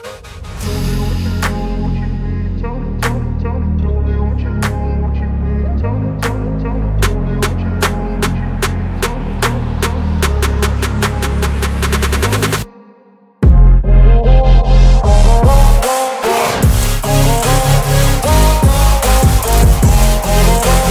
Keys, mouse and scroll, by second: 3.4 ctrl+c, 4.1 click, 5.2 t, 7.2 click, 8.7 ctrl+v, 10.5 BackSpace, 11.8 click, 14.7 v, 15.0 ctrl+t, 16.9-20.6 shift+drag, 20.4 click.